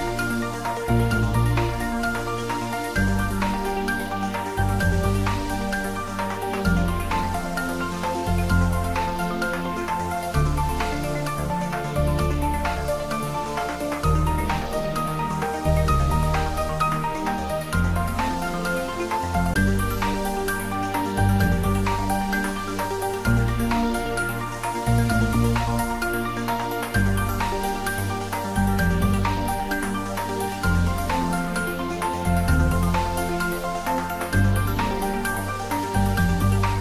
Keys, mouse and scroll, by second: 0.4 g, 14.4 click, 15.7-16.1 scroll down 1, 16.1-18.0 middle drag, 18.5-19.6 typing, 21.3 click, 21.9-22.2 scroll up 1, 22.8 `, 23.2 3, 24.3 s, 25.9 click, 26.1 s, 26.6 y, 27.8 click, 28.2 scroll down 1, 29.1 click, 29.7 scroll down 1, 31.0 g, 32.7 click, 34.3 g, 36.6 click.